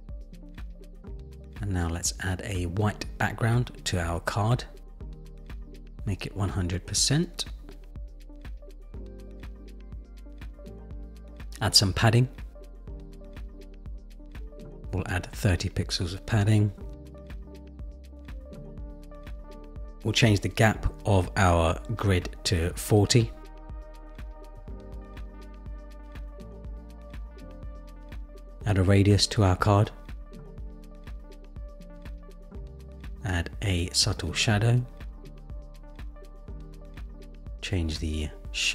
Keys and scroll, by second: 10.2 Return, 14.0 Return, 16.4 shift+Up, 21.8 shift+Down, 31.0 shift+Up.